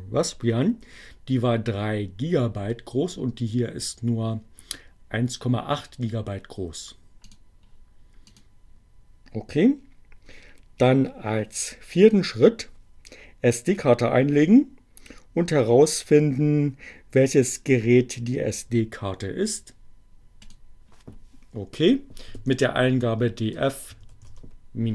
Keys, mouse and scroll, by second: 7.0 click, 7.9 click, 20.0 click, 21.3 d, 22.4 f, 22.9 -, 24.2 h, 24.3 Return.